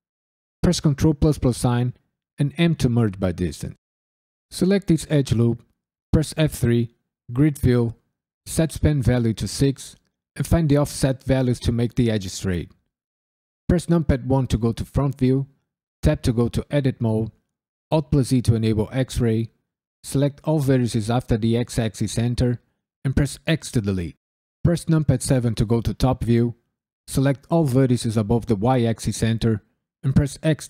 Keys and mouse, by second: 0.8 ctrl+KP_Add, 2.5 m, 4.5 alt+click, 6.3 F3, 8.7 click, 10.7 click, 11.1 click, 11.4 click, 11.7 click, 12.0 click, 12.4 click, 14.2 KP_1, 16.0 Tab, 16.4 KP_Decimal, 17.1 Tab, 17.9 alt+z, 18.8 drag, 23.4 x, 24.6 KP_7, 26.2 drag, 30.4 x.